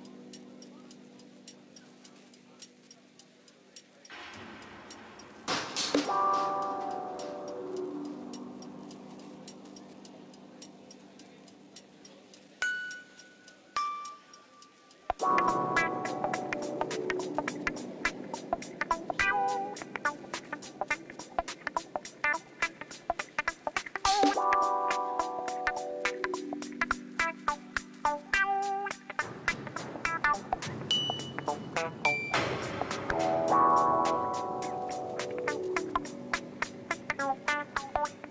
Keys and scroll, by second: 1.5 z, 2.9 shift+a, 4.3 Tab, 5.6 s, 6.1 5, 6.3 Return, 6.6 Tab, 7.8 shift+z, 9.0 b, 9.8 ctrl+j, 11.5 shift+z, 12.0 g, 12.3 z, 17.3 s, 18.4 g, 18.6 x, 19.4 s, 20.6 alt+a, 22.3 Tab, 23.0 2, 23.7 e, 24.0 z, 27.1 ctrl+b, 28.6 Tab, 31.8 g, 32.0 z, 33.4 g, 33.5 y, 35.2 ctrl+alt+0, 36.7 n.